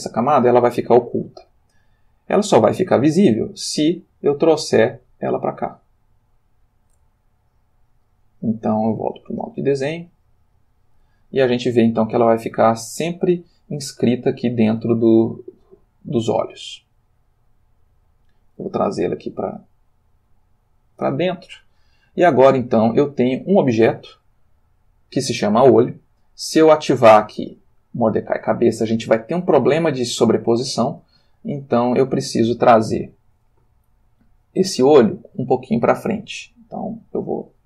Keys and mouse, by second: 2.4 click, 3.5 click, 4.5 g, 6.5 click, 8.9 click, 10.1 click, 17.1 click, 18.3 click, 18.9 g, 20.7 click, 22.7 click, 23.4 click, 27.3 click, 29.2-31.3 middle drag, 31.4-32.4 ctrl+middle drag, 36.4 middle click, 37.5-37.6 drag.